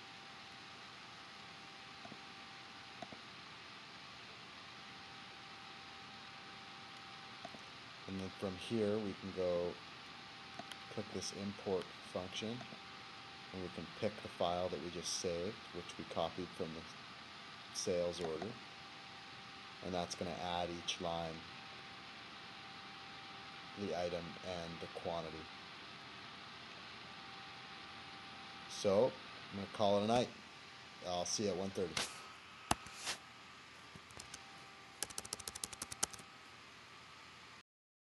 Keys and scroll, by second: 34.2 super+Tab.